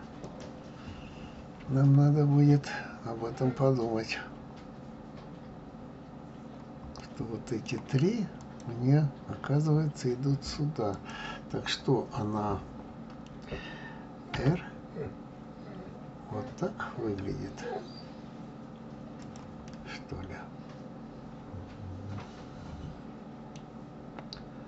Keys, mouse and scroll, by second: 0.2 click, 6.9-8.4 middle drag, 8.4 click, 10.9 click, 14.3 r, 19.6-22.6 middle drag.